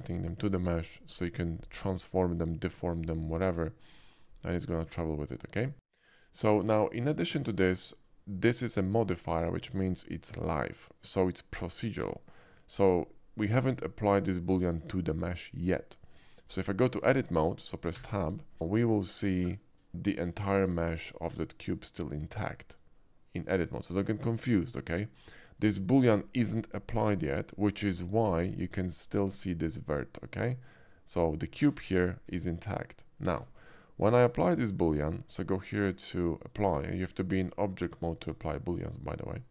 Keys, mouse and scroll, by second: 4.8 middle click, 5.2 shift+middle click, 6.9-7.3 shift+middle drag, 7.5 shift+middle click, 7.8 shift+middle click, 16.4 click, 18.0 Tab, 18.6 Tab, 18.9-19.9 middle drag, 20.0 click, 21.0 click, 21.8 click, 22.7 click, 23.7 click, 28.2 middle click, 29.0 click, 31.9 a, 32.3 middle click, 33.3 Tab, 34.8 click, 36.5 click.